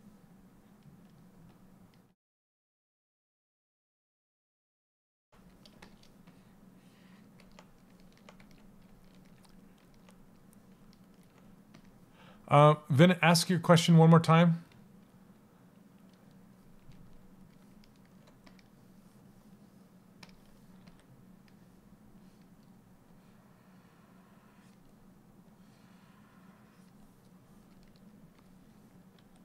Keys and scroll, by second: 28.7 s.